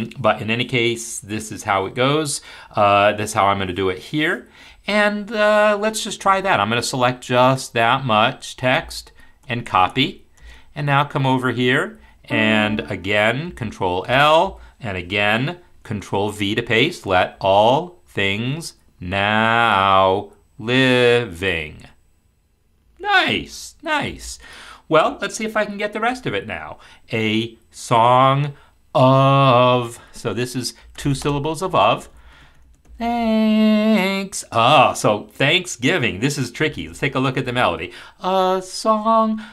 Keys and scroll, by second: 13.5 ctrl+l, 16.5 ctrl+v, 17.3 ctrl+v, 18.1 ctrl+v, 19.0 ctrl+v, 19.6 ctrl+v, 20.6 ctrl+v, 21.3 ctrl+v.